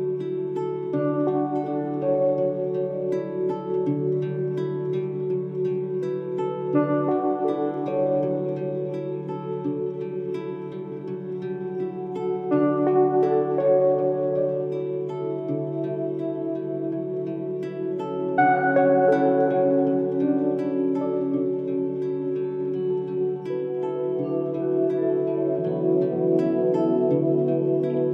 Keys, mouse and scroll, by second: 2.9 click, 4.2 shift+middle click, 4.9-7.1 scroll down 23, 7.2-8.9 drag, 9.5 Tab, 10.4 Tab, 11.1 a, 12.3 click, 13.2-15.1 drag, 16.4 click, 18.9-21.6 drag, 21.6 Tab, 23.0-24.6 drag, 24.6-26.3 drag, 28.0 scroll down 2.